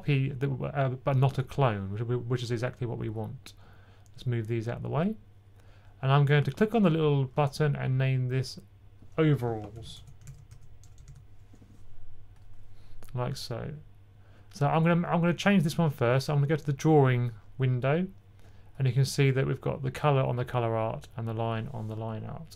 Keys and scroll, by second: 9.4-11.4 typing.